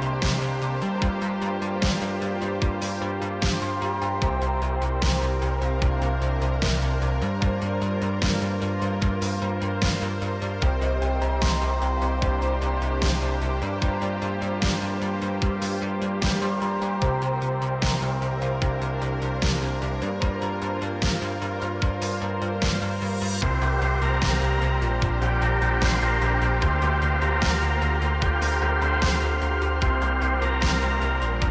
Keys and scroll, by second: 0.0-0.2 typing, 2.7-7.0 typing, 8.8 l, 9.4 l, 10.8 l, 11.2 l, 26.5-28.0 typing, 29.0 ctrl+z, 29.7-31.5 typing.